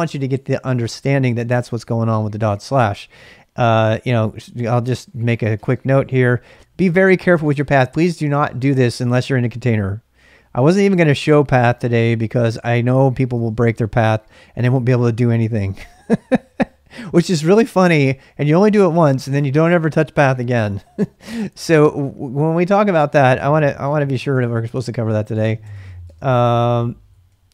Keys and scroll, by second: 4.6-5.9 typing, 7.0-8.6 typing, 11.7 ctrl+a, 11.8 ctrl+a, 12.5 ctrl+a, 12.7 ctrl+a, 13.5 ctrl+c, 13.8-14.6 typing, 20.6-22.1 typing, 24.1 typing, 24.3 shift+Tab, 25.4 shift+a, 25.7 Tab, 26.0 Return, 26.7-27.5 typing.